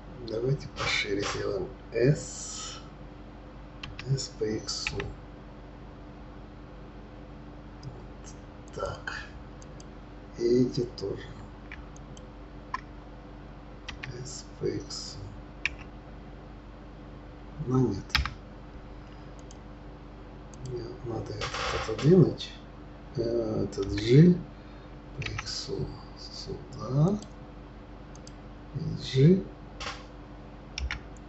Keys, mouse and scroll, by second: 3.8 s, 9.6 click, 11.9 shift+click, 13.9 s, 19.4 click, 20.5 click, 23.8 g, 28.1 click, 30.8 g.